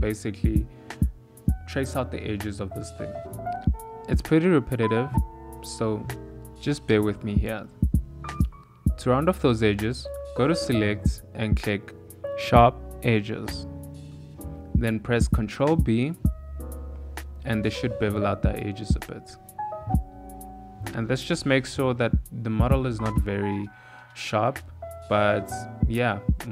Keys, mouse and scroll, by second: 0.3 s, 1.7 click, 2.7 e, 4.5 e, 4.5 s, 6.2 e, 8.4 alt+3, 8.4 alt+click, 9.1 s, 11.0 click, 13.7 click, 14.4 ctrl+g, 14.5 ctrl+b, 19.2 Tab, 20.4 ctrl+2, 20.9 click, 21.4 middle click, 22.5 shift+middle click, 22.5 shift+scroll up 1, 22.6 shift+middle click, 22.8 middle click, 24.7 KP_1, 25.5 s, 25.5 g.